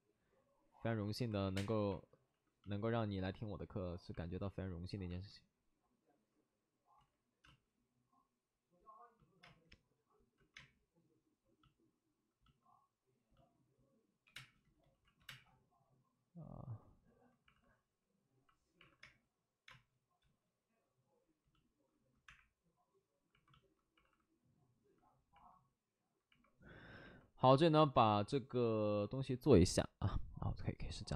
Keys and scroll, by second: 0.8 2, 0.8 ctrl+z, 1.4 2, 1.5 2, 1.5 space, 2.2 alt+s, 6.9 ctrl+z, 7.2 ctrl+z, 7.4 space, 9.4 space, 10.3 ctrl+z, 10.5 space, 14.2 3, 14.2 space, 14.8 ctrl+shift+z, 15.2 space, 15.2 3, 17.4 alt+s, 19.0 alt+s, 19.0 space, 22.2 space, 22.2 1, 23.9 alt+s, 25.5 alt+s, 27.4 alt+s, 28.0 alt+s.